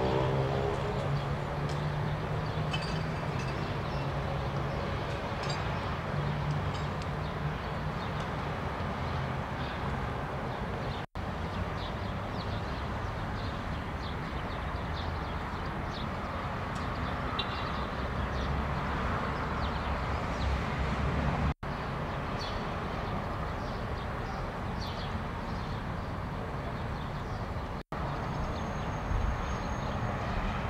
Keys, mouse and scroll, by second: 10.9-12.6 drag, 21.4-22.9 drag, 27.7 click, 28.8 click.